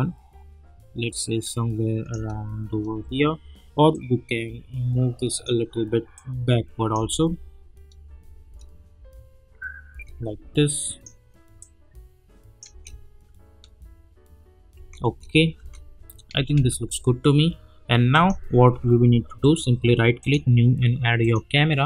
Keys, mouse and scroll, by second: 2.1 space, 3.9-7.0 drag, 7.0 space, 10.9 click, 12.7 space, 14.7 space, 18.1 click, 18.7 u, 19.4 right click, 20.2 click.